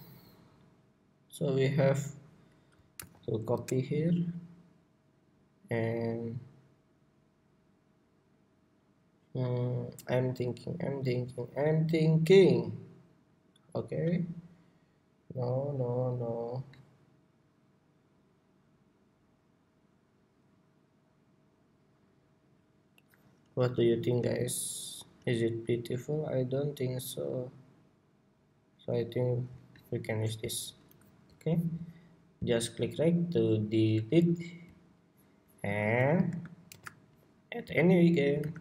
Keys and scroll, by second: 2.7 super+v, 36.4 shift+super+c, 38.1 super+s.